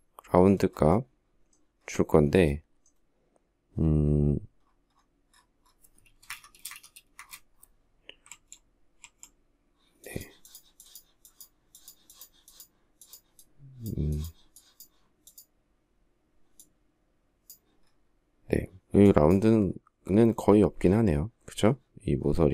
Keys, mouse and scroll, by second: 5.5 space, 5.6 Escape, 6.0 space, 6.1 Escape, 6.5 space, 6.7 Escape, 7.7 alt+Tab.